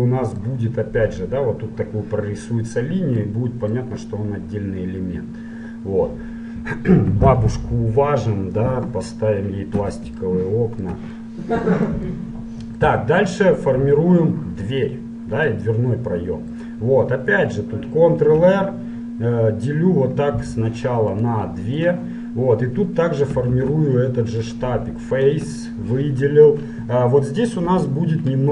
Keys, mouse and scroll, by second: 2.4-7.5 middle drag, 7.9-10.3 middle drag, 10.7 middle click, 12.5-14.0 middle drag, 14.8-16.5 middle drag, 17.0-21.1 middle drag, 18.4 ctrl+r, 22.4-23.6 middle drag, 23.6 ctrl+Tab, 25.3-27.0 right drag, 27.0 middle click, 27.7 KP_1.